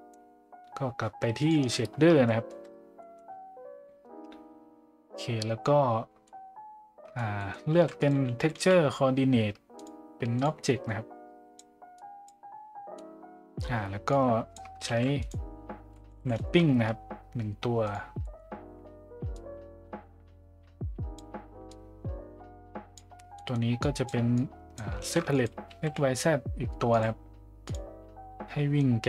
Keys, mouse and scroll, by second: 2.3 middle click, 3.0 middle click, 6.2-7.1 middle drag, 7.4 middle click, 7.7 shift+a, 10.9-11.6 drag, 12.0 click, 12.9-13.6 middle drag, 14.1-14.5 drag, 14.9 shift+a, 18.2 middle click, 19.4-21.2 drag, 21.7-23.0 drag, 23.3 middle click, 23.8 click, 24.3-24.8 drag, 25.0 shift+a.